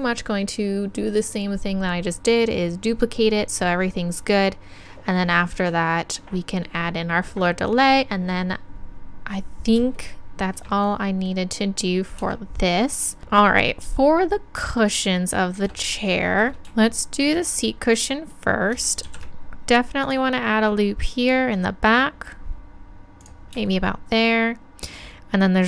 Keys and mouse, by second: 10.0-12.3 drag, 12.3 Tab, 19.1 ctrl+r, 23.3-25.5 drag.